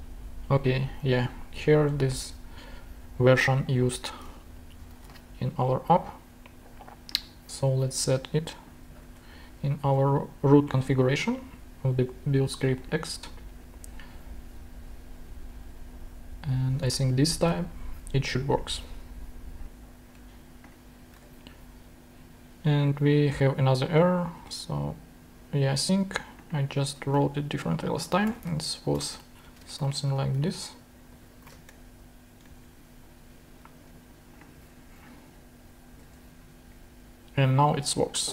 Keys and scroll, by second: 4.6 shift+super+Right, 5.0 shift+super+c, 9.8 super+v, 17.0 super+Tab, 21.2 super+Tab, 24.4 super+Tab, 28.0-30.1 typing, 29.3 alt+Right, 29.5 alt+space, 30.5 super+Right, 30.9 super+Left, 31.3 =, 32.5 shift+., 36.1 shift+super+Tab.